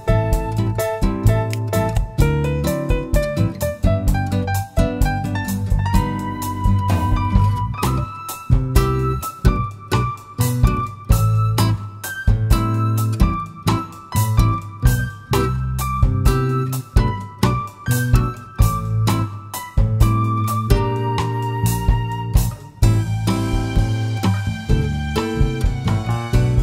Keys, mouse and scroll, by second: 3.8-4.1 drag, 4.4 scroll up 1, 5.8-20.0 middle drag, 6.6 scroll up 1, 11.8 `, 13.8-14.5 scroll up 2, 14.5-15.0 scroll up 1, 15.0-16.5 scroll down 2, 16.5-18.3 drag, 19.0 click, 19.8 click, 20.2-21.0 middle drag, 20.8 scroll up 2, 21.3-26.6 middle drag, 26.5-26.6 scroll up 2.